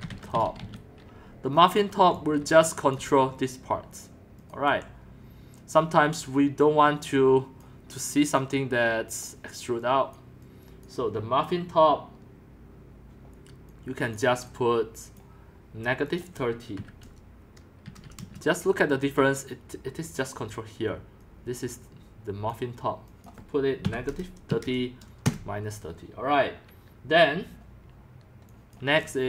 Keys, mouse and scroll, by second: 0.0-1.1 typing, 1.5 scroll, 2.1-3.0 typing, 3.1-4.7 drag, 4.7 BackSpace, 7.6 click, 9.5 click, 10.2 click, 10.9 click, 13.4 click, 16.8-18.4 typing, 21.2-22.2 drag, 22.0-22.7 typing, 23.2 click, 23.8-25.2 typing, 28.7-29.2 drag.